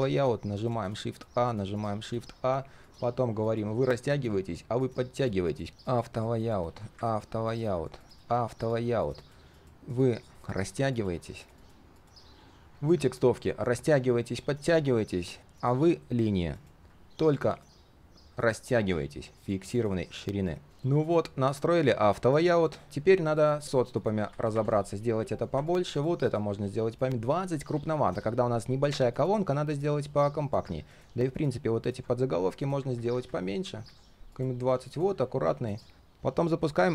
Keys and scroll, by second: 20.7 ctrl+z, 20.7 ctrl+shift+4, 22.5 ctrl+shift+4, 22.8 ctrl+z, 35.9 ctrl+/.